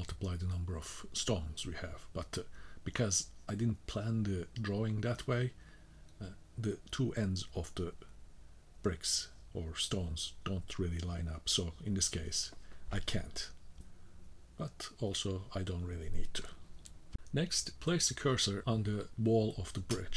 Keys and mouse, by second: 5.7 middle click, 7.6 middle click, 8.6 middle click, 8.9 middle click, 10.1 middle click, 10.6-13.4 middle drag, 15.3 middle click, 17.7 shift+right click.